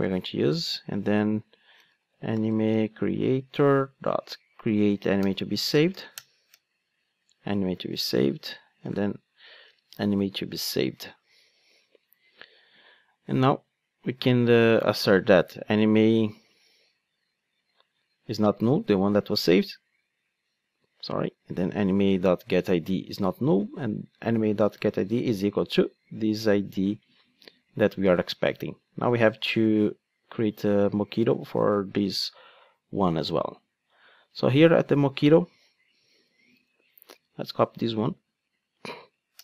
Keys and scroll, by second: 3.4 Return, 6.1 alt+Return, 9.6 Return, 38.0 super+c.